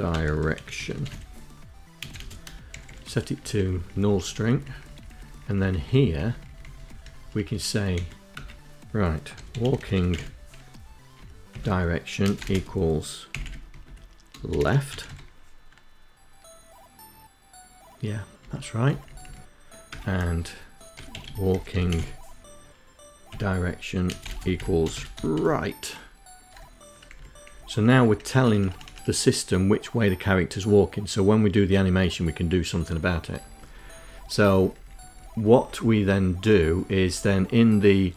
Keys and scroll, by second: 0.8 space, 0.9 space, 1.5 shift+2, 1.6 shift+2, 2.1 Down, 2.3 Down, 2.5 Down, 2.6 Down, 3.0 Down, 3.1 Down, 3.2 Down, 3.6 Down, 3.9 Down, 4.0 Down, 4.2 Down, 4.4 Down, 4.5 Down, 4.6 Down, 4.8 Down, 5.4 Down, 5.8 Up, 5.9 Up, 6.1 Up, 6.2 Up, 6.7 End, 7.1 Return, 7.9-9.4 typing, 9.9 Down, 10.3 Tab, 11.0-14.3 typing, 12.6 Left, 17.2 Down, 17.7 Down, 17.8 Down, 18.0 Down, 19.6-21.2 typing, 22.0 Tab, 22.8-25.3 typing, 26.2 Down, 26.6 Down, 26.9 Up, 27.1 Up, 27.2 Up, 27.4 Up, 32.1 Down, 32.3 Down, 32.5 Down, 32.7 Down, 32.9 Down, 33.0 Down, 33.2 Down, 33.3 Down, 33.5 Down, 33.8 Down, 33.9 Down, 34.1 Down, 34.3 Down, 34.4 Down, 34.6 Down, 34.7 Down, 35.7 Down, 35.9 Down, 37.1 Down, 37.3 Down, 37.4 Down, 37.6 Down, 37.7 Down, 38.0 Down.